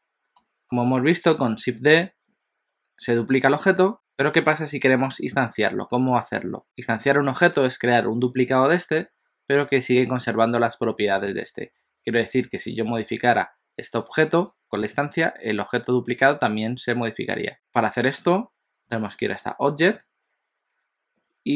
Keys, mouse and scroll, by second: 19.9 click.